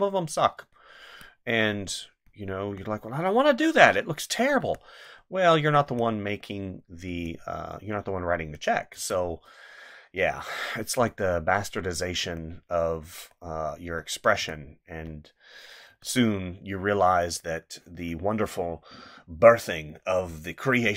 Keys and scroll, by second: 2.7 space, 4.6 space, 5.9 space, 8.9 space, 12.2 space, 14.4 space, 15.9 space.